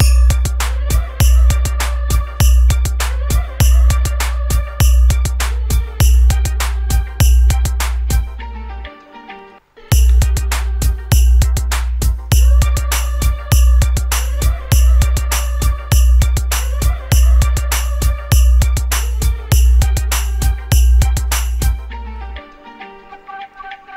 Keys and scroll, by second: 9.7 space.